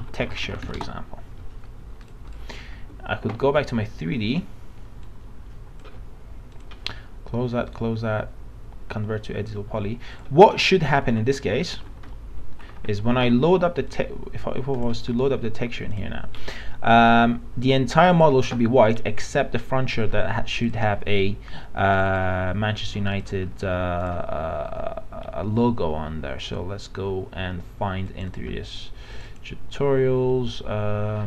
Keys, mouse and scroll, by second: 0.0-0.7 typing, 2.0 click, 2.4 click, 2.8 alt+Tab, 3.3 alt+Tab, 5.0-6.3 drag, 7.6 right click, 10.2 click, 11.0 alt+middle click, 11.4-13.4 alt+middle drag, 13.8 click, 23.5 scroll up 1, 24.0 click.